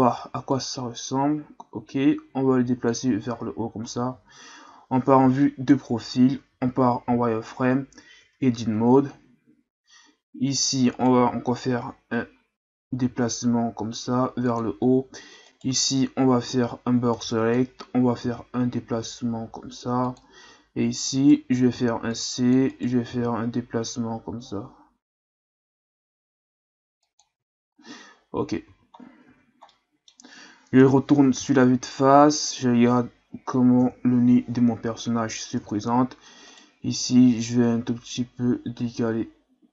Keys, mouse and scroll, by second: 0.5-3.3 drag, 3.3 Tab, 3.9-4.7 scroll down 1, 4.7 KP_3, 5.6-6.5 scroll up 3, 6.5 z, 7.3 shift+scroll up 3, 8.2 Tab, 10.9 right click, 13.0 g, 15.5 right click, 17.1 b, 18.2 g, 21.1 right click, 21.6 c, 23.1 g, 28.7 z, 28.9 scroll down 4, 29.2 Tab, 29.7-30.8 middle drag, 30.8 KP_1, 31.7-33.8 scroll up 2, 33.8 KP_3, 34.9-35.5 scroll up 2, 35.5 scroll up 1, 35.6 Tab, 36.5 right click, 37.4-39.7 drag.